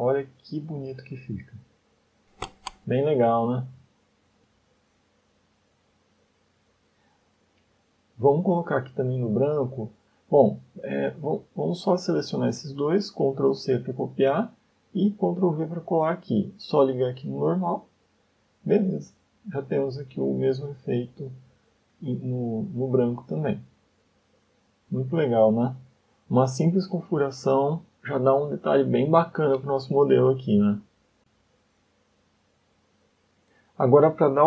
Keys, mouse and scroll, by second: 0.6 scroll down 1, 1.0 middle click, 7.1 shift+middle click, 8.1 scroll up 1, 9.3 click, 11.1 click, 11.8 click, 12.5 shift+click, 13.3 ctrl+c, 14.3 click, 15.3 ctrl+v, 16.6 click, 19.0-19.5 scroll up 3, 19.9 middle click, 20.7 shift+middle click, 22.3-22.7 scroll down 2, 22.9 ctrl+space, 23.3 middle click, 24.0 shift+middle click, 24.6 scroll down 4, 25.3 middle click, 29.6 scroll down 2, 30.0 shift+middle click, 30.6 middle click, 32.8 scroll up 2, 33.2 scroll down 1, 33.6 middle click.